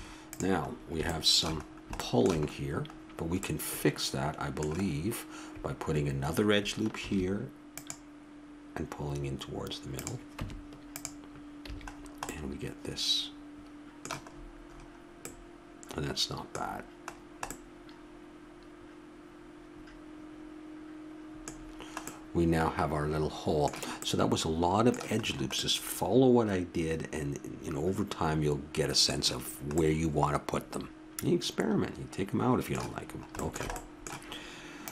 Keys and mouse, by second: 7.0 ctrl+r, 10.4 Tab, 11.7 a, 11.9-14.2 middle drag, 20.1 middle click, 21.5-27.8 middle drag, 29.4-32.2 middle drag, 32.9 a, 33.0-34.9 middle drag.